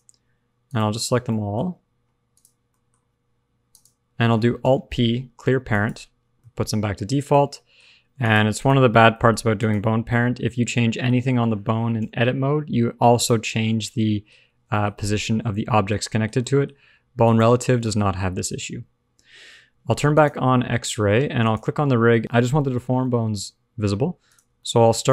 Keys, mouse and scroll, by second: 0.6 shift+click, 1.2 middle click, 1.5-2.0 scroll up 4, 2.1 shift+scroll down 1, 2.2 shift+click, 2.6 shift+middle click, 3.6 shift+click, 4.5 alt+p, 6.1-6.6 scroll down 3, 6.6 middle click, 7.3-8.0 scroll up 3, 7.5 middle click, 8.0 scroll down 2, 8.3 click, 8.5 click, 9.0 middle click, 9.3 scroll up 1, 9.5 click, 10.0 middle click, 11.1 scroll down 1, 11.9 alt+p, 13.7 middle click, 14.4 scroll down 2, 14.6 shift+middle click, 14.8 shift+scroll up 1, 14.9 middle click, 16.0 shift+middle click, 16.2 shift+scroll down 2, 16.4 middle click, 17.2 click, 17.8 shift+middle click, 18.0-19.0 scroll up 1, 19.0 scroll up 1, 20.2 shift+click, 21.4 shift+click, 22.2 shift+click, 23.0 middle click, 24.2 click, 24.5 shift+middle click.